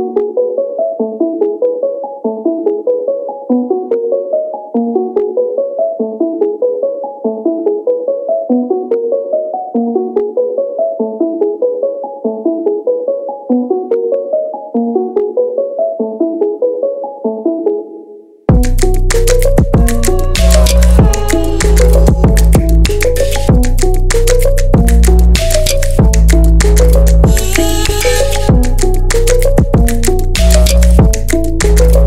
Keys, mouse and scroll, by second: 0.6 click, 1.4 scroll down 2, 1.6-2.9 middle drag, 2.9 Tab, 3.3 scroll down 1, 3.4-3.9 middle drag, 3.9 KP_1, 4.1-4.7 scroll down 1, 4.7-7.1 shift+middle drag, 7.1-7.6 scroll up 1, 7.6 shift+middle drag, 7.8-8.3 scroll up 1, 8.3 Tab, 8.4 middle click, 9.1-9.7 scroll up 6, 9.7-11.2 middle drag, 11.2 alt+click, 14.4 shift+click, 15.1 ctrl+shift+click, 15.7-17.7 shift+middle drag, 17.7 alt+shift+click, 18.9 ctrl+shift+click, 19.6 ctrl+shift+click, 21.9 alt+shift+click, 23.2 ctrl+shift+click, 24.5 scroll down 1, 24.7-26.6 middle drag, 26.6 scroll up 1, 26.8-28.8 middle drag, 28.8-31.7 drag.